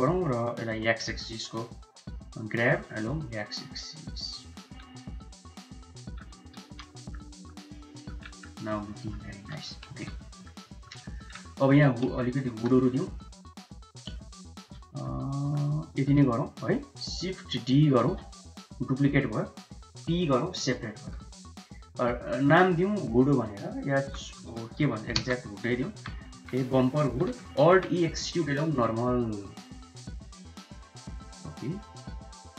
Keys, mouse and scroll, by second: 1.8 x, 2.5 g, 6.6 shift+z, 6.8 middle click, 7.3 Tab, 7.7 middle click, 8.7 middle click, 8.9 middle drag, 10.0 ctrl+s, 10.2 middle click, 10.7 shift+middle click, 11.0 middle click, 12.0 Tab, 12.5 3, 12.7 click, 14.0 shift+click, 14.7 click, 15.3 shift+click, 16.2 click, 18.1 shift+d, 20.1 p, 21.2 Tab, 23.2-25.4 drag, 24.6 o, 25.8 middle click, 25.9 Tab, 26.4 a, 26.6 shift+middle click, 27.9 alt+e, 30.8 middle click, 30.9 click.